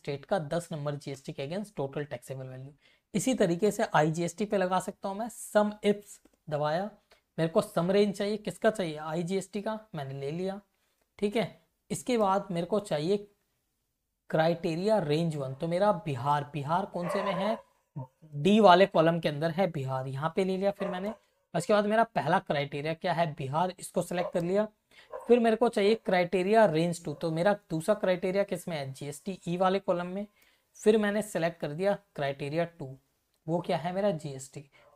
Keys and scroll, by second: 1.2 Return, 1.5 Up, 2.4 Right, 3.4-5.1 typing, 5.3 Down, 5.9 Tab, 6.9 Left, 9.3 ctrl+shift+Down, 9.8 Up, 12.2 ,, 15.0 ctrl+Up, 15.5 Down, 16.2 Left, 18.0 Right, 19.0 ctrl+shift+Down, 20.8 ,, 21.3 Up, 22.1 Down, 22.7 Left, 24.1 ,, 26.6 Left, 28.7 ctrl+shift+Down, 29.3 Up, 30.8 ,, 31.4 Up, 31.7 Down, 32.7 Left, 33.1 Up.